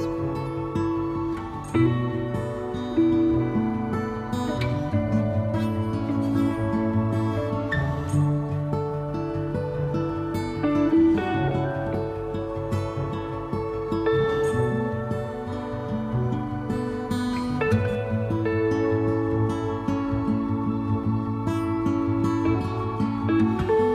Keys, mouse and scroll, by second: 3.1 middle click, 4.0-7.5 drag, 7.5-9.2 middle drag, 9.2-11.8 drag, 11.8 middle click, 12.7-16.6 drag, 16.6-17.8 middle drag, 17.8-20.9 drag, 20.9 middle click, 21.6-23.9 drag.